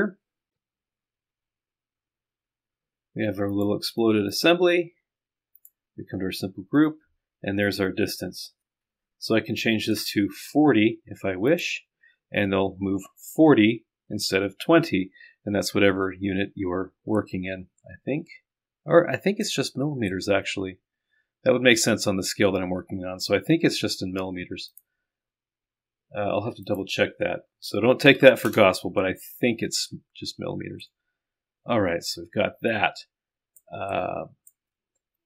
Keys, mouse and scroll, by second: 4.3 click, 5.0-5.5 scroll down 1, 5.5 scroll down 1, 5.6 click, 7.7 click, 17.3-19.5 drag, 20.3-21.5 drag, 21.5 right click, 24.7 click, 26.6 click, 28.4 KP_0, 30.5 scroll down 2, 30.9-33.9 drag, 34.0 click.